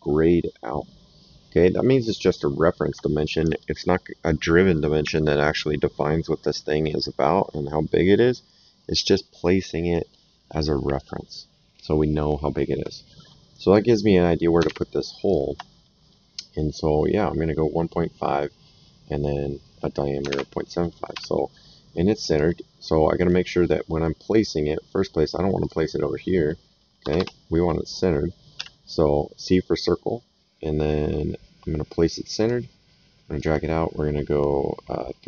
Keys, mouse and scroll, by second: 14.6 alt+Tab, 15.2 alt+click, 20.3 alt+Tab, 21.1 s, 22.3 click, 25.6 click, 27.0 Escape, 32.3 click.